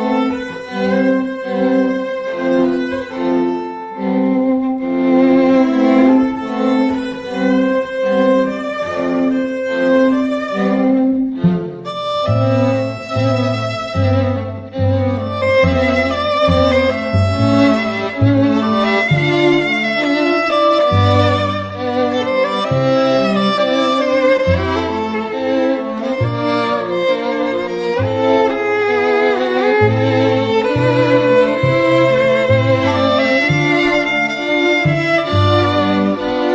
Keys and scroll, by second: 1.5 p, 1.8 [, 5.1 [, 27.4 [, 27.7 [.